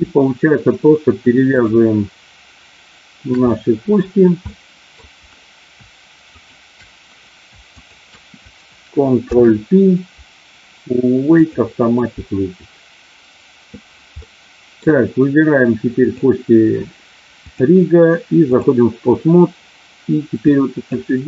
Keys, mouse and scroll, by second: 1.4 shift+click, 3.5 middle click, 4.5 middle click, 6.4 shift+click, 9.1 ctrl+p, 14.1 middle click, 16.0 click, 17.6-18.6 drag, 20.4 click.